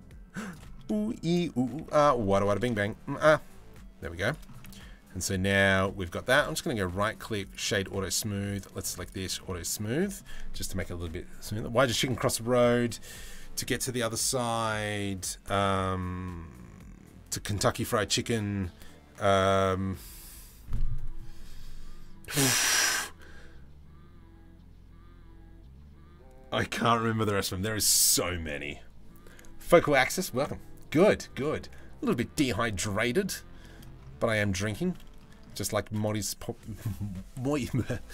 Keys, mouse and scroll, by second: 0.7 middle click, 1.4 e, 2.2 alt+s, 4.3 Tab, 4.4-5.5 middle drag, 6.0-7.2 middle drag, 7.5 click, 8.3 click, 9.2 middle click, 32.4 middle click, 33.2 middle click, 34.2 middle click, 34.8 shift+middle drag.